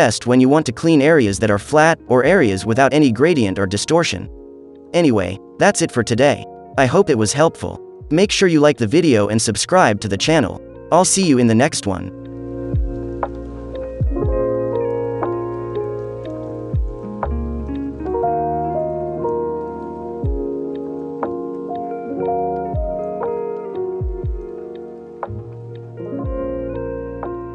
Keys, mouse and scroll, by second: 0.0 click, 1.6 ctrl+z, 1.7 ctrl+z, 2.0 click, 2.8 space, 2.8 click, 3.0 click, 3.2 click, 4.6 click, 5.3 space, 5.4 click, 5.6 click, 6.3 [, 6.9-8.5 drag, 8.6-10.2 drag, 10.7 click, 11.1 click, 12.1 [, 12.7 click, 13.2 ctrl+z, 13.3 shift+click, 13.7 click, 14.4 shift+click, 14.7 ctrl+z, 14.9 shift+click, 15.4 shift+click, 15.7 click, 16.2 space, 16.6 click, 17.0 shift+click, 17.6 click, 18.6 click, 18.6 space, 19.0 middle click, 19.0 scroll, 19.3 space, 19.6 middle click, 19.6 scroll down 2, 19.9 space, 20.0 click, 20.1 middle click, 20.1-20.6 scroll up 2, 20.6 alt+click, 20.9-24.1 drag, 24.1 [, 24.4-25.7 drag, 25.7 middle click, 25.7-26.5 scroll down 6, 26.1 space, 26.4 middle click, 26.5 click, 26.5 space, 26.7 v, 26.9 click.